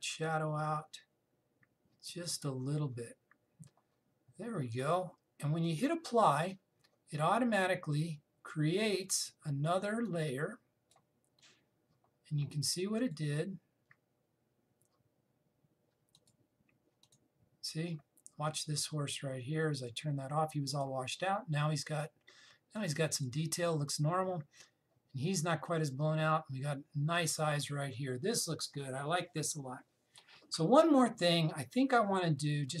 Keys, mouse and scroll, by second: 0.9 click, 6.3 click, 10.7-13.7 drag, 16.8 click, 20.5 click.